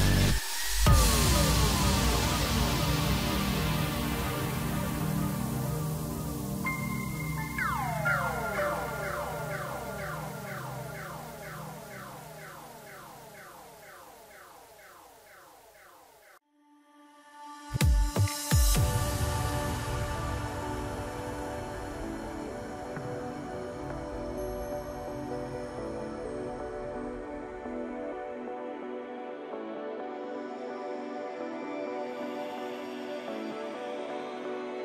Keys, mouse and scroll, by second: 0.4 KP_Divide, 0.7 KP_7, 1.4 Tab, 1.9-2.4 scroll down 1, 2.4-4.2 right drag, 4.2-7.3 drag, 8.2 click, 8.8 click, 9.8 shift+click, 10.6 shift+click, 11.6 shift+click, 12.7 click, 13.2-16.0 drag, 16.0 KP_1, 16.9 middle click, 17.4-17.8 scroll up 1, 18.2 g, 21.9-24.8 drag, 24.8 g, 29.2-30.2 middle drag, 30.2 click, 30.6-31.1 scroll down 1, 31.1 a, 31.5 3, 32.3 e, 34.3-34.8 middle drag.